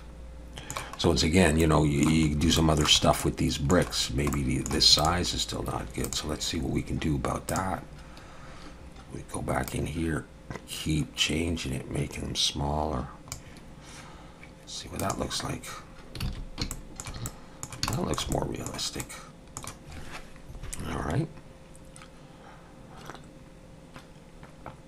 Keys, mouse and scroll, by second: 1.6 middle click, 2.3 scroll up 1, 2.6 shift+middle click, 3.2 middle click, 4.0 scroll down 1, 4.3 middle click, 5.0 click, 6.0 click, 15.0 click, 16.3 alt+a, 16.7 shift+middle click, 17.3 middle click, 17.9 shift+middle click, 18.3 middle click, 19.0 middle click.